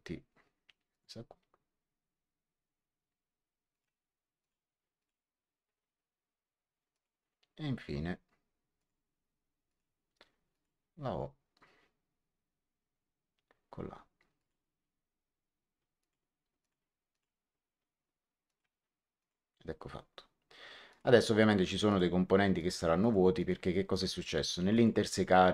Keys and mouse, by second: 0.8 click, 3.6 click, 6.8 click, 8.7 click, 14.3 click, 15.9 click, 18.4 click, 20.8 click.